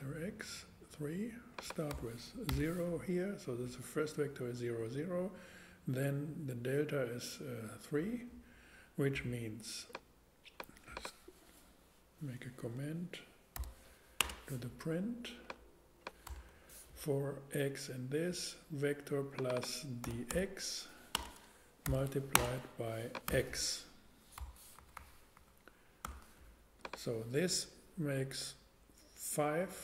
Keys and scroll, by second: 1.9 BackSpace, 2.5 0, 13.5 alt+3, 14.2 alt+space, 14.9 space, 16.2 BackSpace, 20.0-23.3 typing, 24.4 BackSpace, 24.8 Right, 26.0 x.